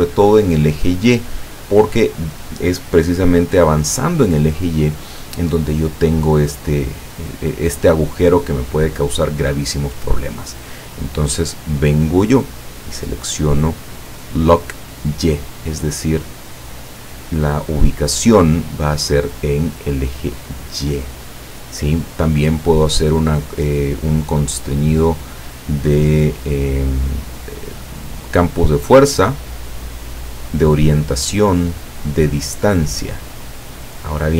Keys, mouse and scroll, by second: 10.9-12.4 drag, 12.9 click, 16.2 click, 20.2 click.